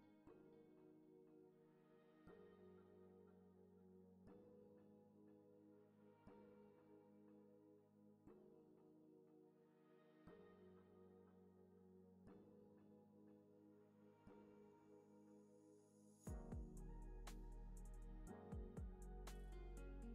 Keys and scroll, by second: 0.3 x, 1.3 super+c, 1.4 super+v, 1.9 z, 2.8 x, 8.6 Down, 10.4 x, 11.3 super+c, 11.5 super+v, 11.9 super+c, 12.1 super+v, 12.5 x, 17.5 Left.